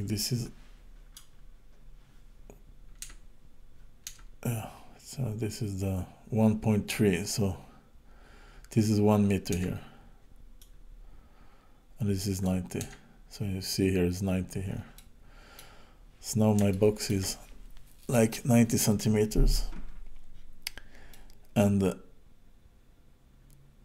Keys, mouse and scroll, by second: 1.6-3.0 scroll down 3, 3.0 Tab, 4.1 Tab, 7.3-9.6 scroll up 1, 9.6 Tab, 10.6 click, 12.8 Tab, 14.9 middle click, 15.9-16.3 scroll down 2, 16.3 scroll up 2, 16.7 shift+middle click, 21.1 middle click.